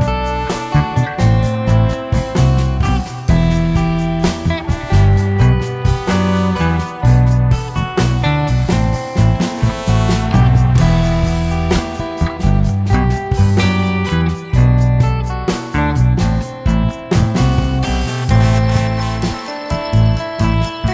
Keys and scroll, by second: 0.4 Escape, 0.5 Escape, 1.8 Escape, 3.6 Escape, 10.9 Escape, 11.0 Escape, 13.7 Escape, 14.1 Escape, 14.1 ctrl+s, 15.9 m, 16.0 space, 17.9 Escape, 17.9-19.0 typing, 19.2 Escape.